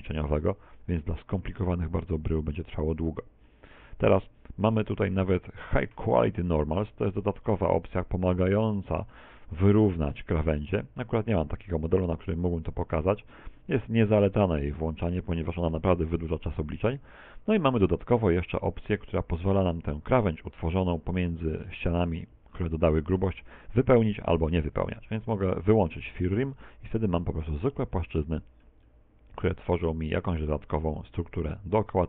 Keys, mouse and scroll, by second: 3.8-4.2 scroll up 5, 4.2 shift+middle click, 8.9 click, 9.9 middle click, 10.5 middle click, 13.0 middle click, 14.0 middle click, 15.2 shift+middle click, 24.1 click, 31.0-31.6 scroll down 2, 31.6 shift+middle click.